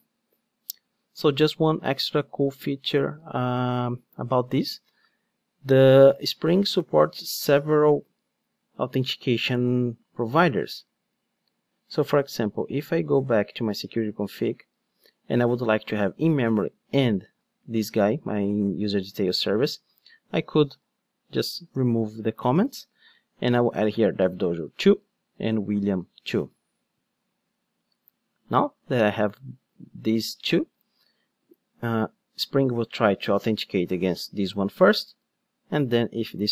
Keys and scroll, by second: 21.7 super+/.